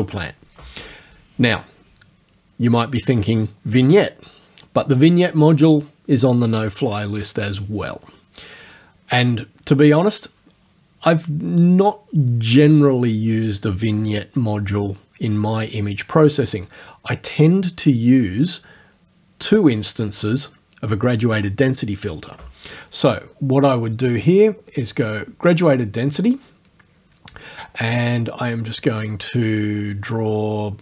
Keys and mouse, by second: 24.8 click, 28.7-30.8 right drag.